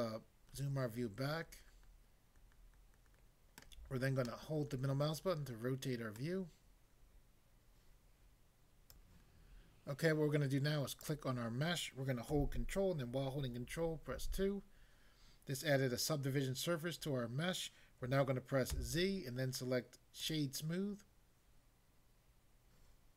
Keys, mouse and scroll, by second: 6.2 middle click, 8.9 click, 11.0 click, 14.1 ctrl+2, 18.7 z, 20.2 click.